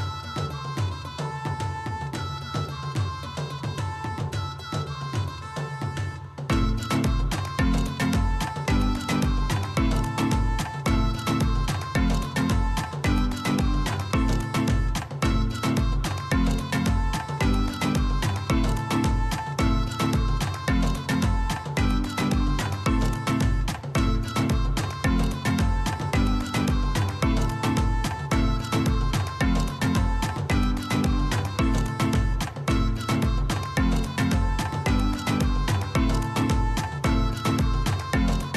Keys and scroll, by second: 18.8 ctrl+z, 19.2 ctrl+z.